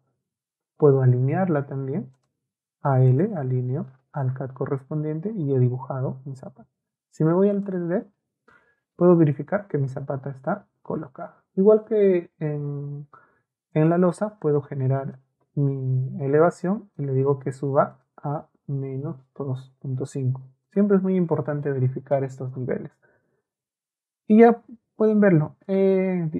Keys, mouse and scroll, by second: 0.7 a, 1.2 l, 2.2 right click, 3.1 right click, 3.7 Escape, 4.1 Escape, 5.3 click, 7.5 click, 11.9 e, 12.5 l, 13.8 click, 14.4 click, 15.0 click, 15.5 Escape, 15.8 Escape, 16.9 click, 17.9 click, 18.9 KP_Subtract, 19.7 KP_2, 19.9 KP_5, 20.6 middle click, 21.3-22.5 scroll up 1, 22.5 Escape, 22.5-23.4 scroll up 1, 23.4-24.2 scroll up 1, 24.2 shift+scroll up 1, 24.3-25.7 shift+middle drag.